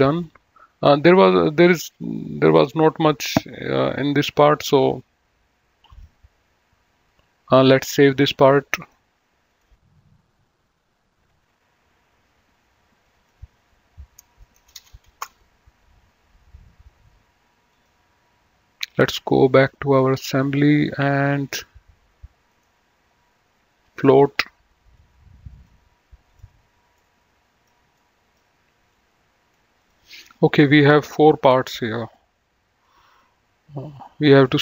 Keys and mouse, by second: 1.1 click, 2.6 click, 6.1 click, 8.8 click, 10.9 click, 13.3 click, 14.8 BackSpace, 15.0 Return, 17.9 click, 19.7 click, 21.1 middle click, 22.7 right click, 24.1 click, 26.5 click, 27.2 middle click, 29.0 click, 30.4 middle click, 32.4 click.